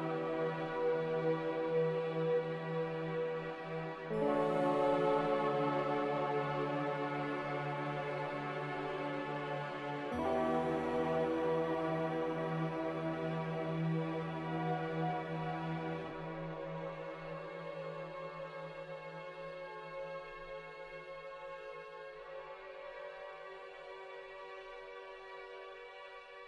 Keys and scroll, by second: 2.4 z, 3.4 a, 6.7 5, 17.5 0, 21.3 Delete.